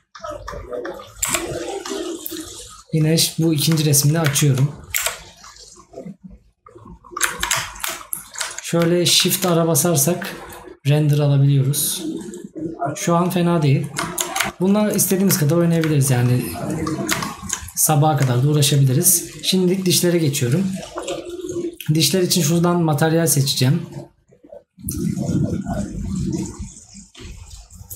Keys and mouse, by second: 3.8 right click, 7.7 right click, 15.5 right click, 18.4 right click, 20.8 right click.